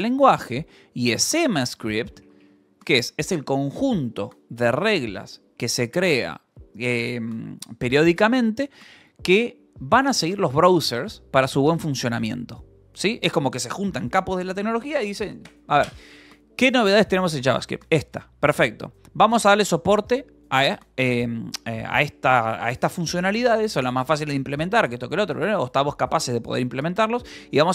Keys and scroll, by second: 1.0 BackSpace, 1.4 Left, 1.9 Right, 2.0 Left, 2.1 Right, 2.2 Left, 2.3 Right, 2.3 Left, 2.7 Right, 2.8 Left, 2.9 Right.